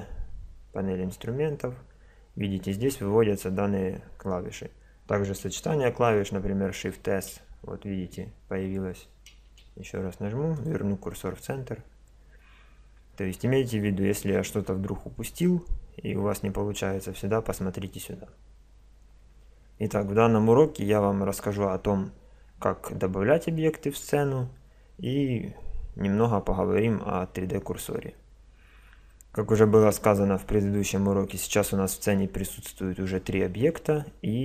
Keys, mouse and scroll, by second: 1.2 n, 1.2 t, 7.1 shift+s, 9.5 shift+s.